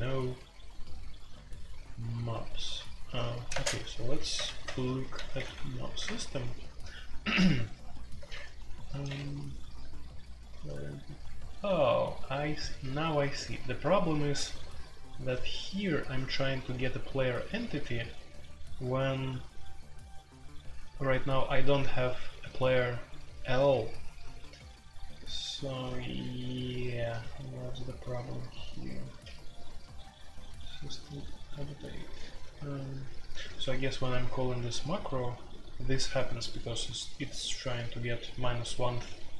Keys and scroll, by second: 2.7-5.5 typing, 6.0 Return, 7.3-8.0 typing, 10.5-11.2 typing, 12.8-14.2 typing, 15.7-17.3 typing, 32.3-34.4 typing.